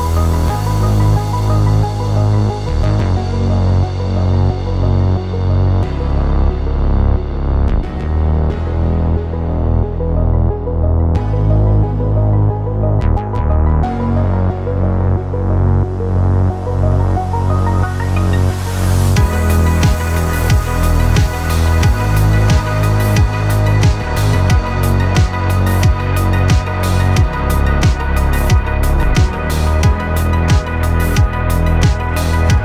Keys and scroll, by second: 10.6 v, 16.4 v, 22.9 v, 24.0 Escape.